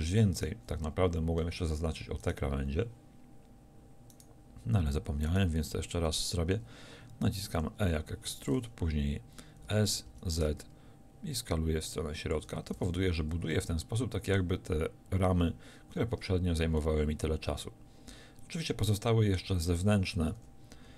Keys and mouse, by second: 7.6 e, 9.7 s, 12.8 a, 13.1 z, 16.0 middle click, 18.9-20.9 middle drag, 19.6 a, 19.8 z, 20.4 a.